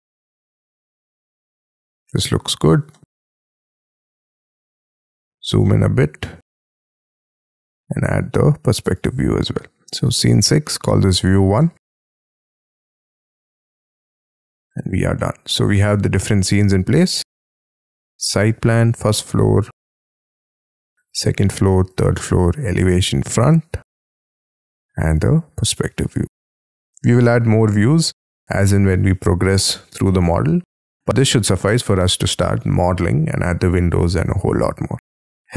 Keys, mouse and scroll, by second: 0.2 scroll up 4, 0.5 middle click, 1.4 middle click, 2.9 middle click, 5.1-5.5 scroll up 1, 8.0 right click, 11.3-13.8 typing, 14.2 Tab, 15.1 middle click.